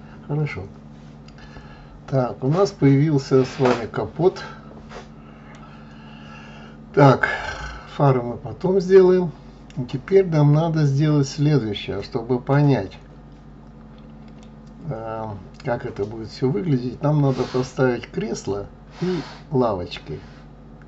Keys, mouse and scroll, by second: 5.9-7.7 scroll down 2, 7.7-8.1 scroll up 2, 8.1-8.9 scroll down 1, 8.9-11.9 middle drag.